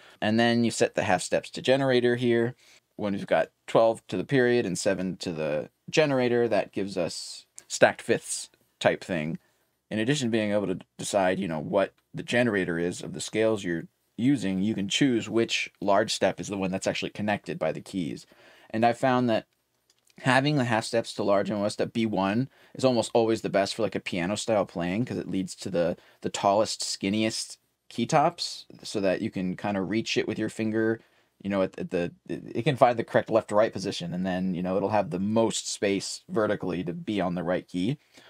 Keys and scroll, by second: 0.0-6.4 typing, 9.4-10.2 typing.